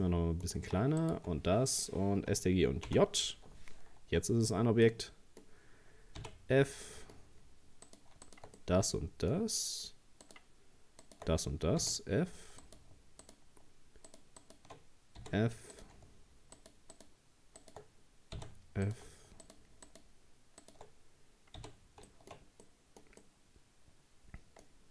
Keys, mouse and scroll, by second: 0.0-1.0 middle drag, 1.0 shift+right click, 2.9 ctrl+j, 4.0 Tab, 4.4-4.9 scroll up 4, 4.9-6.2 middle drag, 6.2 f, 6.9-7.9 middle drag, 7.9 right click, 8.3 shift+right click, 8.6-10.2 middle drag, 10.2 shift+right click, 11.0 shift+right click, 11.8 f, 12.6 right click, 13.2 shift+right click, 14.1 shift+right click, 14.4 shift+right click, 15.2 f, 15.7 right click, 16.6 shift+right click, 16.9 shift+right click, 17.6 shift+right click, 18.4 f, 18.8 right click, 19.4 shift+right click, 19.9 shift+right click, 20.6 shift+right click, 21.6 f, 22.1 shift+middle click, 22.6-23.2 scroll up 1, 23.2-24.7 middle drag, 24.7 scroll up 1.